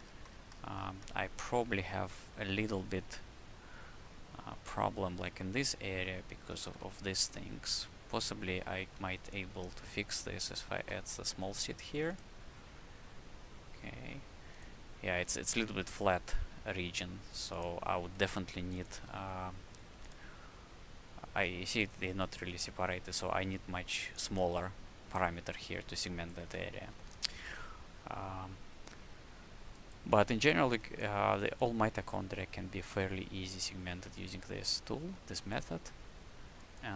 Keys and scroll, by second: 6.4 w, 8.8 shift+c, 10.9 a, 12.0 a, 19.0 c, 20.0 c, 26.2-27.2 typing.